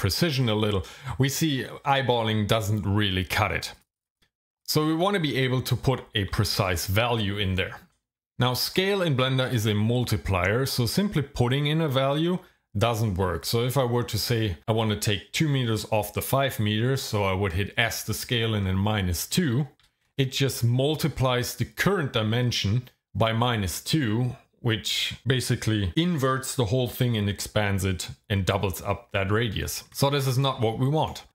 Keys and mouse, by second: 0.3 click, 3.9 click, 4.0 click, 4.1 click, 6.5 ctrl+z, 19.8 s, 20.0 KP_Subtract, 20.5 KP_2, 30.1 ctrl+z, 31.0 right click.